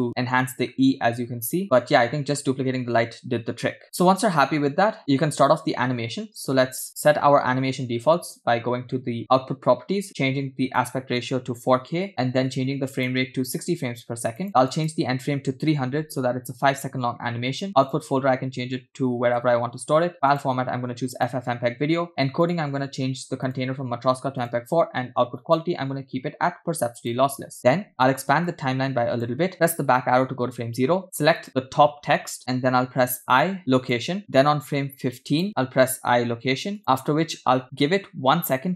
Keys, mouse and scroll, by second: 0.3-0.9 scroll up 3, 1.6-1.9 scroll down 3, 4.0-4.4 scroll down 1, 4.4 scroll up 2, 7.6 click, 10.8-12.1 drag, 12.1 0, 12.9-14.4 drag, 14.4 scroll down 2, 14.7-16.8 drag, 16.6 0, 17.8 scroll down 2, 17.8-19.4 drag, 19.4 /, 20.3-21.5 drag, 22.1 scroll down 2, 22.4 click, 23.1-23.4 scroll down 1, 23.4-24.7 drag, 25.4-27.3 drag, 27.8-28.4 scroll down 4, 28.5 click, 30.2 Left, 31.3 click, 33.3 i, 35.6 click, 36.6 i.